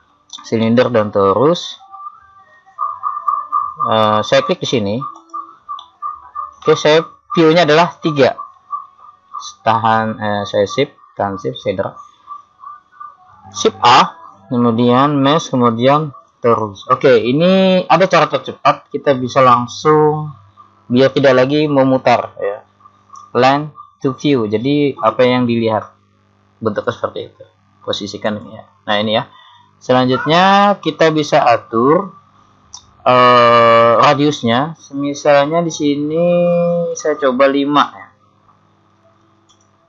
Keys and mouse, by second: 0.7 middle click, 2.9-5.2 middle drag, 5.2 click, 7.9 KP_3, 13.9 shift+a, 16.5 shift+a, 20.4-22.7 middle drag, 28.3 click, 30.2-34.9 middle drag, 36.9 click.